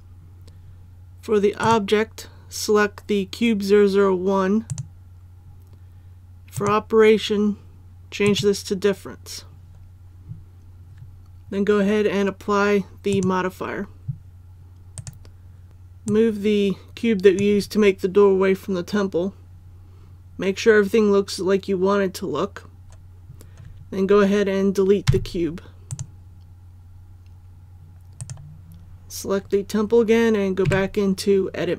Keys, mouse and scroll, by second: 14.9 right click, 15.7 ctrl+z, 16.0-18.1 drag, 25.0 x, 25.8 click, 28.1-29.1 right drag, 30.6 Tab.